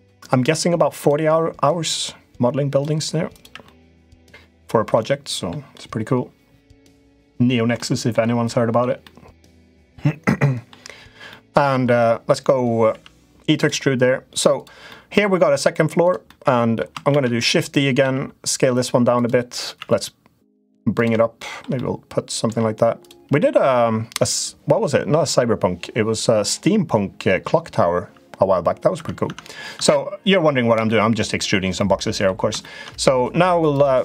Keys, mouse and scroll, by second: 1.6 click, 3.4 middle click, 4.7 middle click, 7.5 middle click, 8.2 middle click, 8.8 middle click, 9.5 middle click, 11.0 middle click, 12.6 e, 14.6 middle click, 16.0 middle click, 16.8 shift+d, 17.7 s, 19.5 e, 21.2 middle click, 21.6 middle click, 22.7 click, 28.7 Tab, 29.0 Tab, 29.5 Tab, 30.5 middle click, 31.5 middle click, 32.3 shift+middle click.